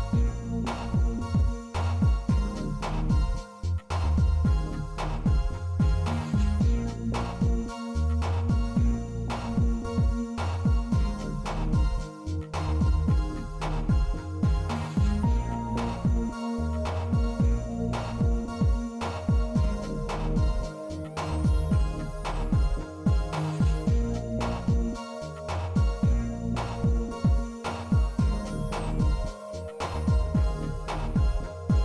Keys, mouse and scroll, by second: 0.4 click, 1.2-3.1 drag, 3.6 click, 4.3 n, 5.2 shift+middle drag, 7.9 shift+a, 13.9 click, 15.8 s, 18.1 s, 19.5-22.0 drag, 23.6 click, 27.8-30.3 drag, 30.7-31.2 middle drag, 31.5-31.8 shift+middle drag.